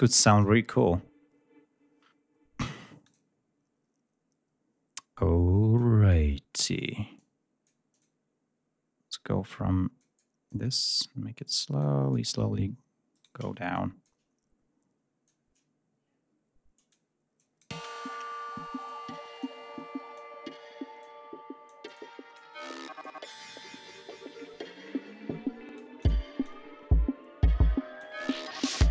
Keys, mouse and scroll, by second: 0.2 click, 2.9 click, 3.7 scroll down 1, 5.6 click, 7.0-7.7 drag, 7.7 click, 9.8 click, 10.3 click, 11.6 click, 13.0 shift+right click, 13.6 shift+click, 15.1-16.9 drag, 17.2-17.6 drag, 17.6 space, 18.6 click, 19.2 click, 20.8 click, 22.2 click, 23.2 click, 23.7-25.7 drag, 25.8 click, 26.2-28.0 drag.